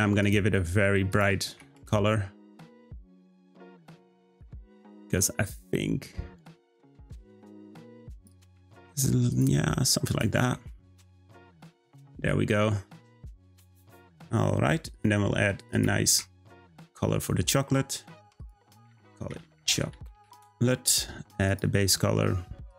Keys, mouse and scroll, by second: 0.2 click, 9.3 click, 16.7 click, 18.0-21.4 drag, 21.4 click.